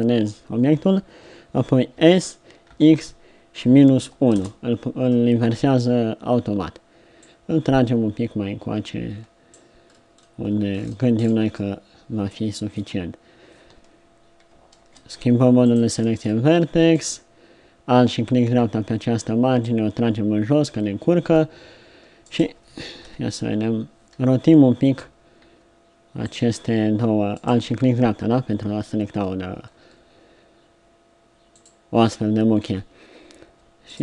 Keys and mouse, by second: 2.0 s, 7.2-9.0 drag, 11.6 click, 11.6-14.3 middle drag, 14.8 ctrl+Tab, 18.4 middle click, 19.7 middle click, 23.1 KP_7, 25.4 r, 29.7 r, 33.9-34.0 drag.